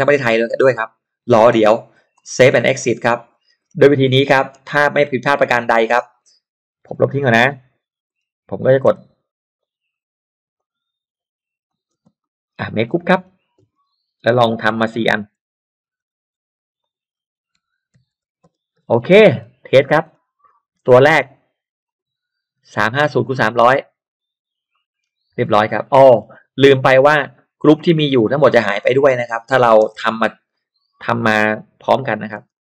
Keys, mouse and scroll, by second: 2.1 click, 3.4-4.4 scroll up 1, 3.9 middle click, 4.4 space, 4.8 click, 6.5 F12, 7.0 Delete, 8.1 scroll up 1, 8.9 l, 9.6 click, 10.6 click, 11.6 click, 12.0 space, 12.2 click, 12.6-13.4 scroll down 4, 12.9 middle click, 13.6-15.2 typing, 13.6-14.0 scroll up 2, 14.4 scroll down 2, 14.5 middle click, 15.1 click, 16.8 click, 17.6 x, 17.9 3, 18.1 Return, 18.4 space, 18.8 Return, 18.8 space, 18.9 scroll down 1, 19.0 middle click, 19.8 scroll up 1, 21.8-24.7 drag, 24.7 middle click, 25.3-25.9 scroll up 1, 26.1-27.0 scroll down 1, 26.6 click, 27.0 scroll up 1, 27.5 scroll down 1, 27.9 middle click, 28.2 scroll down 1, 29.5 scroll down 1, 29.8 scroll up 1, 29.9 middle click, 30.0 l, 30.5 click, 31.5 click, 32.0 click, 32.4 space, 32.5 click.